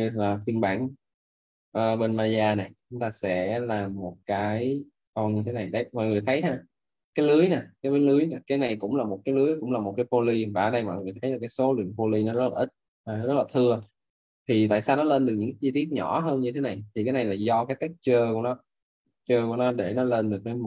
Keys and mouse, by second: 5.7 click, 6.4 alt+middle click, 12.8 alt+click.